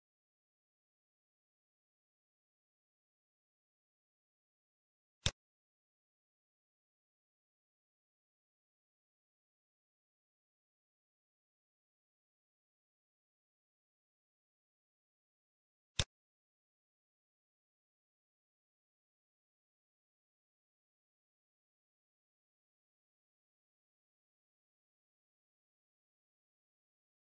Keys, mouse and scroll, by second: 0.1-0.6 scroll down 6, 0.6 middle click, 1.0-1.9 scroll up 11, 1.9 middle click, 2.7-3.6 scroll up 4, 5.1 middle click, 11.3 scroll down 8, 13.5 scroll down 5, 15.9 click, 15.9-16.4 scroll down 2, 17.3 click, 18.3 scroll down 1, 19.1-20.2 scroll up 6, 21.5 scroll up 1.